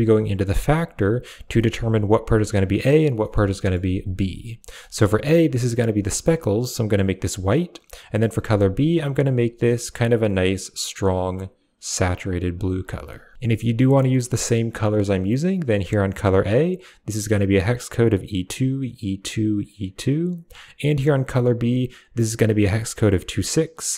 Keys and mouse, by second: 1.0 click, 1.4 middle click, 3.0 middle click, 4.7 middle click, 5.2 click, 8.0 click, 13.3 ctrl+v, 13.6 click, 15.8 click, 21.3 click.